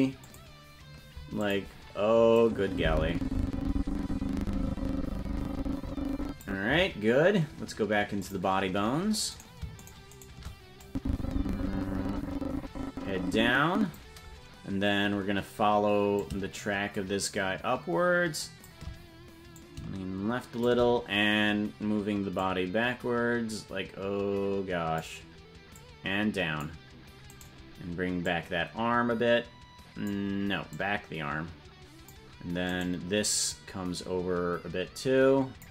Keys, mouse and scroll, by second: 0.3 click, 1.4 click, 2.4-6.5 drag, 8.2 click, 9.4 right click, 9.9 shift+right click, 10.4 right click, 10.8-14.0 drag, 15.1-15.8 scroll down 2, 16.2-18.7 shift+drag, 19.6-20.7 shift+drag, 22.4-25.0 drag, 25.7 click, 27.4 right click, 28.2-30.1 drag, 30.7-32.2 drag, 32.8 right click, 33.5-35.7 drag.